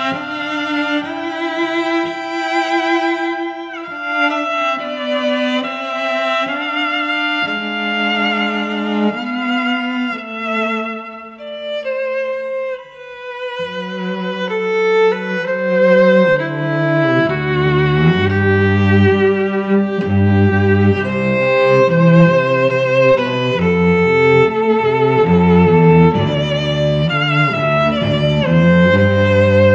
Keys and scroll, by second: 5.7 space, 6.4 v, 7.3 ctrl+v, 10.1 ctrl+alt+g, 14.3 Delete.